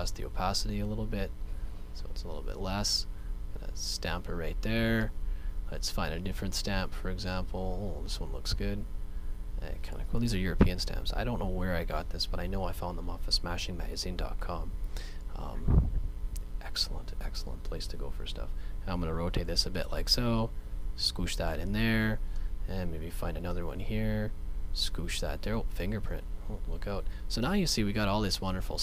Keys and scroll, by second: 10.5 ], 10.7 [, 26.1 space.